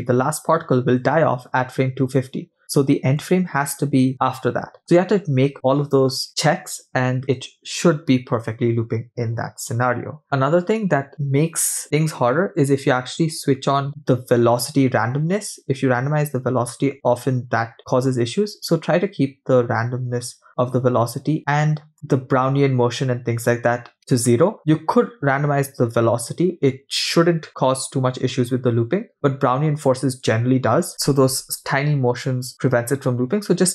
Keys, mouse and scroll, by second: 11.1 click, 11.9-13.4 scroll down 11, 20.5 scroll down 2, 21.2-21.8 scroll down 2, 21.9 click.